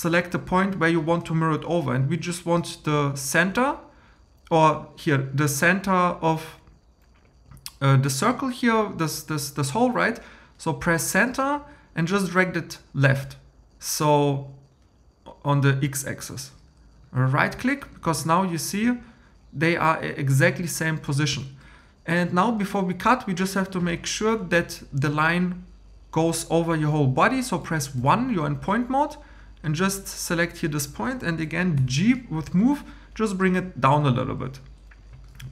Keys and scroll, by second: 28.0 1, 31.8 g.